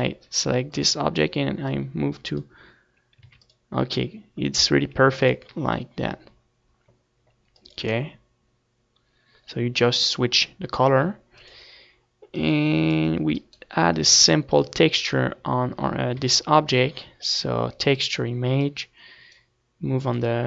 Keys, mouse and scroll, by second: 0.7-3.2 drag, 3.8 ctrl+s, 5.7 ctrl+s, 8.2-9.8 drag, 11.9-13.6 drag, 14.0-18.5 right drag, 14.5 ctrl+s, 18.5 shift+a.